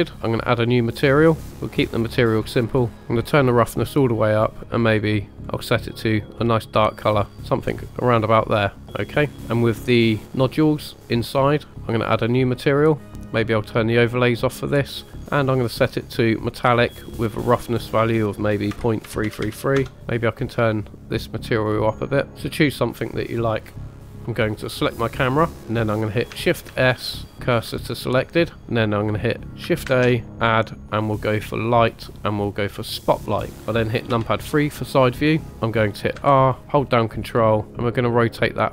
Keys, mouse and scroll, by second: 0.6 click, 1.6 click, 1.9-2.3 drag, 2.4 scroll up 3, 3.1 click, 4.5 click, 11.7 click, 12.7-13.1 drag, 13.3 drag, 14.3 click, 15.0 middle click, 15.5 scroll up 2, 16.2 click, 17.5-18.7 drag, 19.2 KP_3, 20.0 click, 23.8 click, 24.0 click, 24.5 click, 25.6 scroll down 3, 25.6 shift+s, 26.7 shift+s, 29.9 shift+a, 30.9 shift+a, 34.1 KP_3, 36.4 r, 38.6 ctrl+drag.